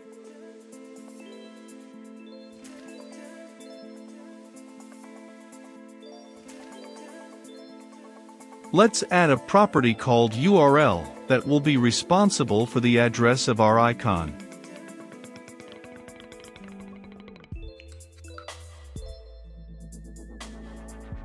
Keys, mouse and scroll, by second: 0.8 shift+], 1.1 Return, 2.4 click, 2.9 Return, 3.8-5.9 typing, 3.9 Caps_Lock, 6.3 Return, 6.8 Caps_Lock, 8.1 click, 8.6-9.5 typing, 9.0 ctrl+x, 10.5 click, 11.1 ctrl+v, 11.8-13.6 drag, 13.7 shift+., 15.7 click, 16.3-19.9 typing, 16.5 Return, 16.9 ctrl+space, 18.8 Return, 20.9 ctrl+space.